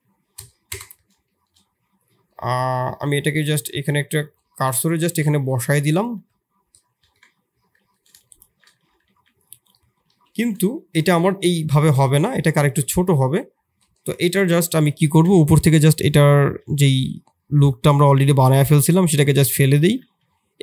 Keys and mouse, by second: 1.2 shift+middle drag, 2.2 middle click, 2.8 shift+s, 4.4 shift+s, 5.0 g, 6.1 KP_1, 6.9 ctrl+KP_1, 8.2 shift+click, 8.4 shift+z, 8.8 g, 10.0 shift+z, 10.3 shift+click, 10.7 middle click, 11.0 Tab, 12.2 KP_3, 13.8 KP_3, 13.8 KP_1, 14.7 shift+click, 15.3 1, 16.4 shift+z, 16.9-18.3 drag, 18.4 x, 19.4 middle click, 19.8 shift+z, 20.4 2.